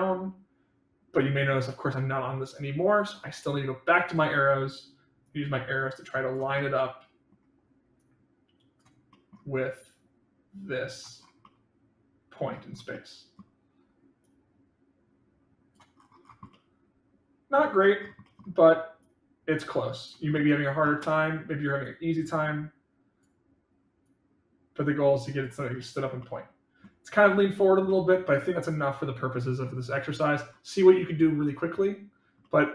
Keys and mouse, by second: 5.3-6.3 drag, 6.5 middle click, 7.9 click, 9.0 middle click, 9.8-10.9 drag, 11.4-12.4 middle drag, 12.9-13.3 middle drag, 14.3-15.7 drag, 16.5-17.5 middle drag, 18.2 middle click, 19.0-20.0 drag, 20.3-20.8 middle drag, 21.9-23.2 drag, 24.1-25.4 drag, 26.2 middle click, 27.9-29.6 middle drag, 32.4-32.7 middle drag.